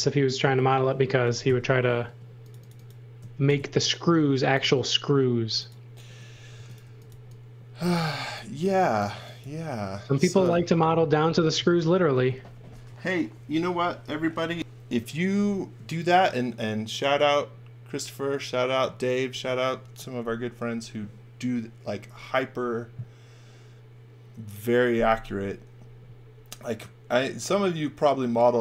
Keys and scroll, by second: 0.4 space, 1.4 super+x, 2.0 space, 3.4 alt+shift+v, 4.3 m, 6.3-9.4 typing.